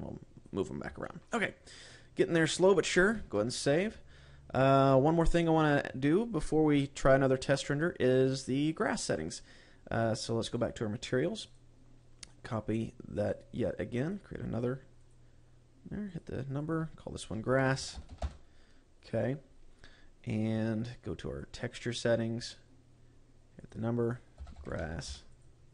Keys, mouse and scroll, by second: 0.3 click, 1.2 scroll down 3, 1.5 shift+middle click, 1.9 middle click, 3.8 ctrl+s, 11.0 click, 12.0 click, 13.7 click, 14.5 click, 17.1 click, 21.9 click, 22.8-23.6 scroll up 7, 24.1 click, 24.5 click.